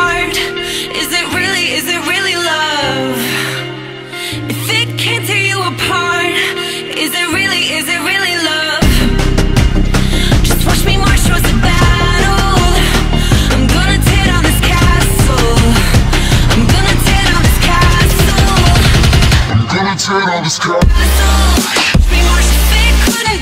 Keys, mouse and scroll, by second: 1.1 drag, 1.5 alt+click, 4.3 alt+drag, 4.5 alt+right click, 4.6 alt+click, 5.7 alt+right click, 5.8-6.9 alt+drag, 6.9 scroll down 1, 7.1 scroll up 5, 7.1 alt+drag, 7.6 scroll up 1, 7.8-8.6 alt+drag, 9.4-13.4 drag.